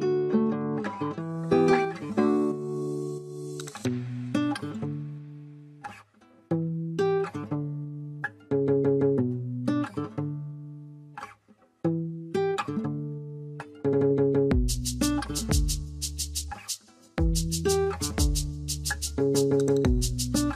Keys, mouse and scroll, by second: 6.6 double click, 7.4-7.9 scroll down 1, 9.9-11.4 scroll up 1.